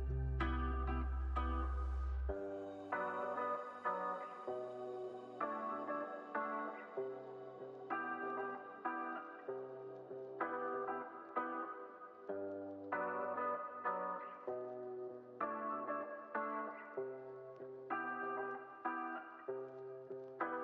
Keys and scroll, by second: 8.0 s, 9.8 x, 11.8 z, 13.8 x.